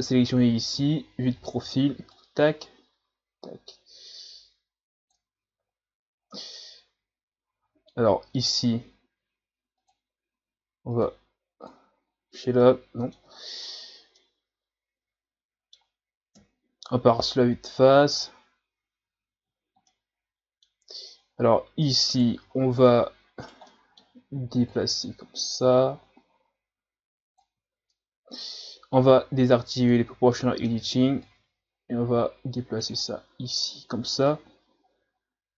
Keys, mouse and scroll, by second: 0.7 KP_3, 2.1-5.1 drag, 5.4 ctrl+z, 6.3-9.3 middle drag, 9.8-11.0 drag, 11.6 click, 12.6 middle click, 13.2 Tab, 13.7 a, 14.0 scroll down 1, 14.2-16.3 middle drag, 16.3 KP_1, 17.8-19.1 scroll up 1, 19.1-19.5 scroll up 1, 19.5-19.8 scroll down 2, 19.8-20.9 middle drag, 20.9-21.7 scroll up 3, 22.1 right click, 22.5-22.9 scroll down 2, 22.9 Tab, 23.5 right click, 23.7-24.7 middle drag, 24.7-27.7 drag, 27.7 ctrl+z, 27.9-29.8 middle drag, 29.8 click, 30.3 middle click, 31.2-33.1 drag, 33.1-34.1 middle drag, 34.1 KP_3.